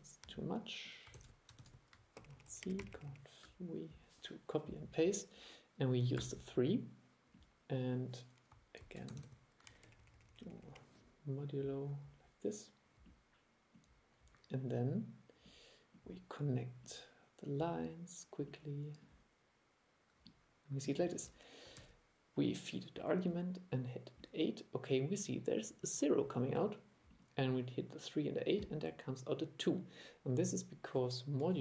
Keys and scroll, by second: 1.2 super+c, 1.6 super+v, 8.9 super+c, 9.2 super+v, 21.8 super+e.